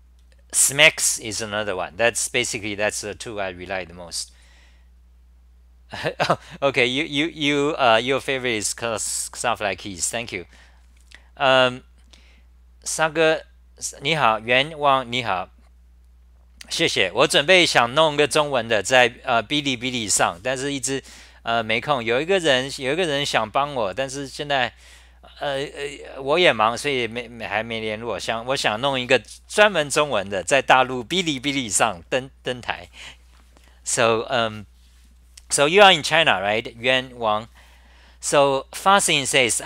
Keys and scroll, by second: 0.0-1.7 typing.